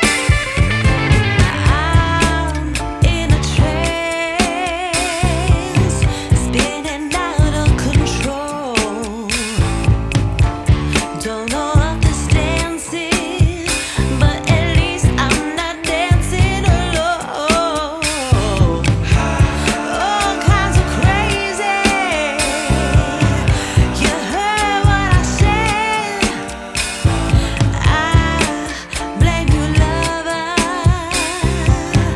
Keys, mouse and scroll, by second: 0.5 click, 0.7 click, 1.0 click, 1.3 space, 2.4 space, 4.8 click, 5.0 shift+click, 5.5 shift+d, 5.9 click, 6.2 click, 6.4 click, 7.4-8.1 drag, 8.4 drag, 9.2 click, 9.9-11.4 drag, 11.6 middle click, 12.3 click, 12.9 click, 16.4-16.9 drag, 17.0 click, 17.4 shift+middle click, 18.2 shift+middle click, 18.8 shift+middle drag, 19.0 click, 23.4 click, 24.0 shift+click, 24.5 click, 24.8 click, 25.4 shift+click, 25.8 click, 26.6 click, 26.9 middle click, 27.2 click, 27.4 click, 27.8 click, 28.1 click, 28.6 middle click, 31.0 click, 31.6 drag, 31.8 click, 32.0 click.